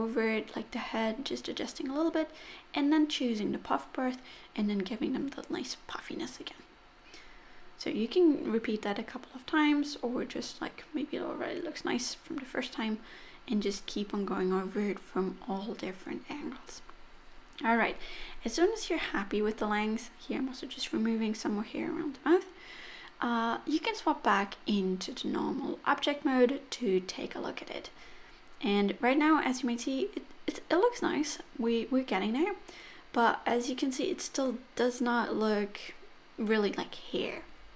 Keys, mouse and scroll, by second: 0.0 middle click, 0.3 click, 0.5 click, 0.6 click, 0.8 click, 0.9 middle click, 1.2 click, 1.4 click, 1.7 middle click, 2.2 middle click, 2.3-3.6 scroll up 2, 3.6 click, 3.9 click, 4.3 click, 10.1 scroll down 4, 10.2 middle click, 10.7-11.2 scroll up 2, 11.4 Tab, 11.7 middle click, 12.3 click, 13.0 scroll down 3, 13.2 middle click, 13.9-14.3 scroll up 3, 14.3 scroll down 2, 14.5 middle click, 15.0 click, 15.2 middle click, 16.5 middle click, 17.1 middle click, 17.7-18.3 scroll up 1, 18.3-19.4 scroll down 11, 19.4 click, 20.9-22.5 scroll down 6, 21.5-22.5 scroll up 1, 22.9 click, 24.7 click, 26.5 click, 27.1 middle click, 27.5-28.4 scroll up 3, 28.4 click, 29.8 click, 31.7-32.2 scroll down 2, 31.8 middle click, 32.5 scroll up 2, 32.8 middle click, 34.6 middle click, 36.2 middle click.